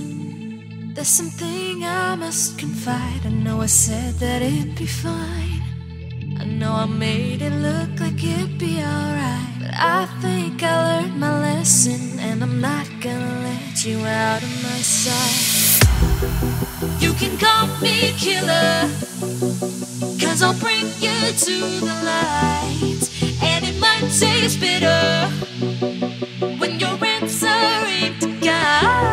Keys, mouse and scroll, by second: 1.3 alt+scroll up 2, 2.0 click, 3.0 Tab, 3.6 Tab, 4.8 click, 5.3 c, 5.6 Tab, 6.2 Tab, 8.3 click, 12.1 alt+Tab, 13.0 click, 13.4 ctrl+c, 13.6 alt+Tab, 15.0 click, 19.7-20.1 alt+scroll down 2, 20.6 scroll up 1, 21.0 click, 22.3 KP_Add, 25.1 click, 26.0 Right, 26.6 KP_Add, 28.7 click.